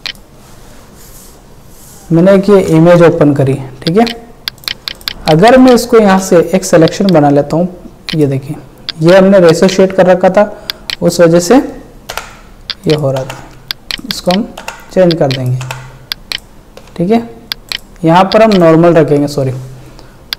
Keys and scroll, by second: 4.9 ctrl+space, 5.4 ctrl+space, 12.1 Delete.